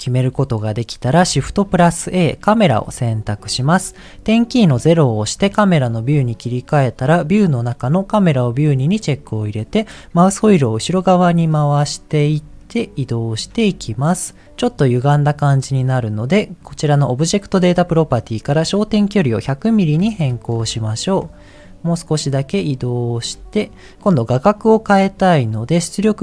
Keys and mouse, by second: 1.7 t, 1.7 shift+a, 4.8 KP_0, 7.1 click, 8.9 click, 12.6 ctrl+middle click, 14.0 shift+middle click, 18.8-20.8 drag, 20.2 KP_0, 21.9-23.3 ctrl+middle drag.